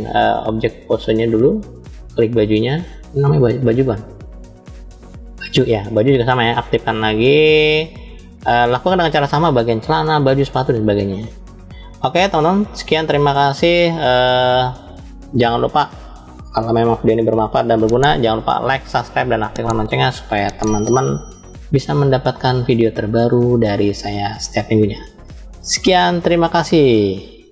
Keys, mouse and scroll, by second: 0.2-0.9 drag, 1.7 click, 3.7-4.7 drag, 6.6 drag, 7.4 click, 8.7 click, 11.1 click, 11.8 middle click.